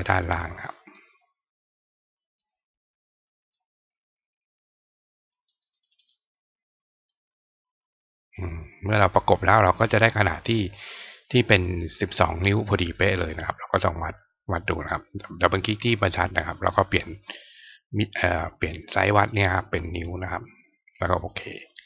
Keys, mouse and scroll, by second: 0.1-0.9 drag, 2.4-3.5 drag, 5.3 click, 5.5 click, 5.8 click, 6.0 click, 7.0-8.3 drag, 9.8 click, 13.7 click, 13.9 click, 16.7 click, 19.8 click, 21.3 click.